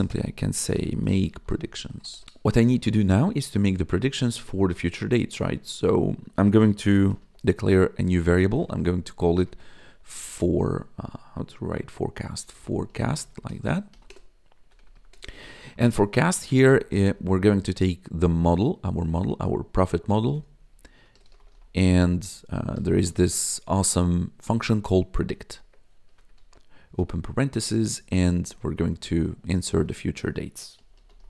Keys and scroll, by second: 0.0-2.7 typing, 6.6-10.3 typing, 12.0-15.1 typing, 20.8-23.7 typing, 25.1 Tab, 25.5 shift+0, 26.0 BackSpace, 26.3 shift+9, 30.5-31.2 typing.